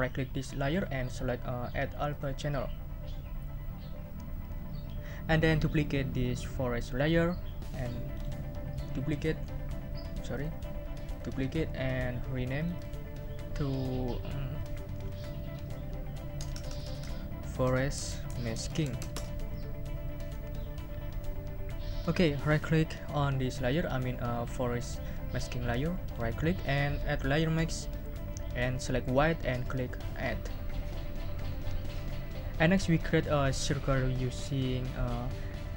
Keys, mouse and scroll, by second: 0.7 right click, 2.1 click, 8.1 right click, 10.3 click, 11.1 click, 12.6 click, 15.5 Right, 16.4 BackSpace, 17.5-19.5 typing, 26.0 right click, 27.3 click, 29.1 click, 30.2 click.